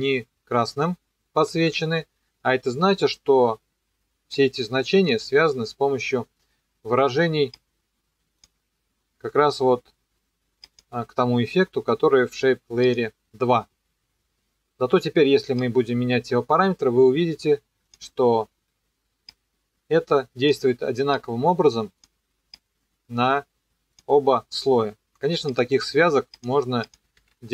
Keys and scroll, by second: 1.5 e, 27.2 ctrl+d.